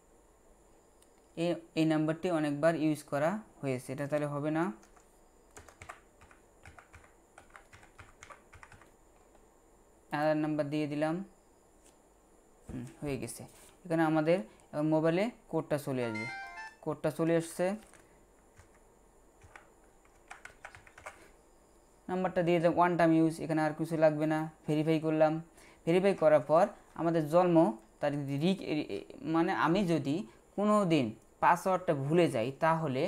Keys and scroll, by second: 4.8-8.7 typing, 18.6-21.0 typing.